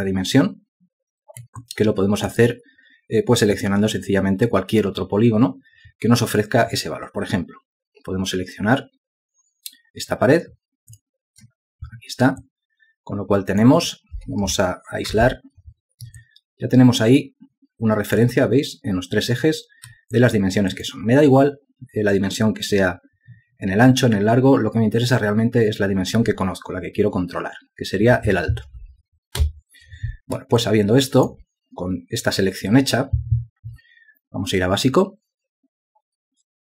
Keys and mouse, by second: 2.1 alt+click, 11.5 shift+click, 13.0 alt+click, 15.7 shift+h, 16.7 alt+click, 20.7 alt+click, 30.0 u, 31.2 alt+click.